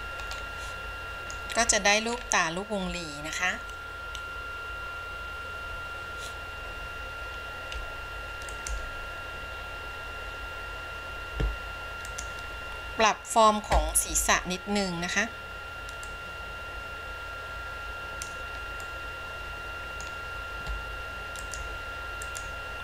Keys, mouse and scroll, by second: 0.4 scroll down 1, 0.6-1.6 middle drag, 1.9-2.3 scroll down 2, 2.3-6.8 scroll up 1, 6.8-7.4 scroll up 2, 12.2 click, 14.2 KP_1, 16.2-18.5 drag, 19.0-20.3 middle drag, 21.5 click, 22.4 click.